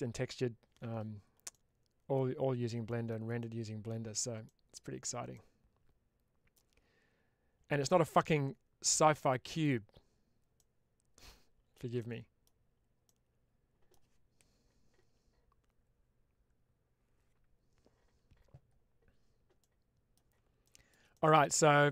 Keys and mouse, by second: 1.4-3.0 middle drag, 3.4-4.9 middle drag, 5.2-6.4 middle drag, 10.5 middle click, 11.9 middle click, 12.9 middle click, 19.5 middle click, 20.6 shift+middle click, 21.0 middle click.